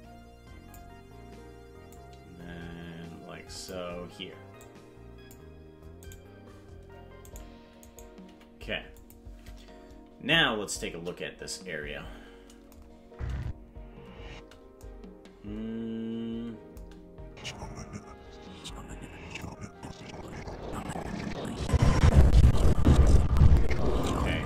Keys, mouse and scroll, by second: 1.9-3.8 drag, 4.5 click, 6.1 right click, 7.1 right click, 7.9 right click, 8.3 g, 10.9 KP_0, 13.1 space, 17.2 space, 19.5-24.2 drag.